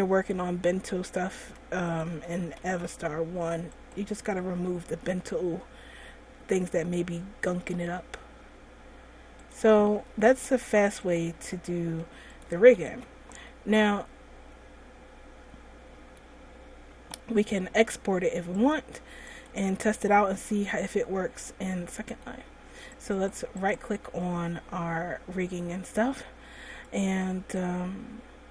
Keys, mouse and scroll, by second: 0.3 right click, 0.4 r, 2.3 a, 2.4 a, 2.9 alt+r, 4.2 right click, 4.9 r, 10.2 a, 10.5 a, 10.8 alt+r, 11.4 right click, 11.6 r, 12.8 a, 12.9 a, 13.2 alt+r, 13.6 middle click, 18.7 click, 19.8 click, 21.1 middle click, 21.7 middle click, 23.3 right click, 24.0 right click, 27.0 click.